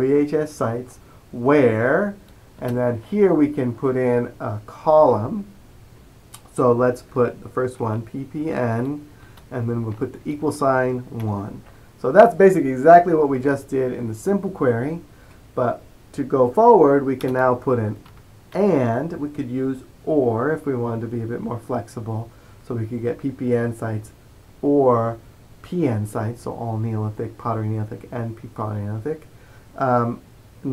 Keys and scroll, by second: 7.9-8.5 typing, 10.0 typing, 11.3 typing, 14.1-14.8 typing, 17.6-19.1 typing, 21.1-21.9 typing.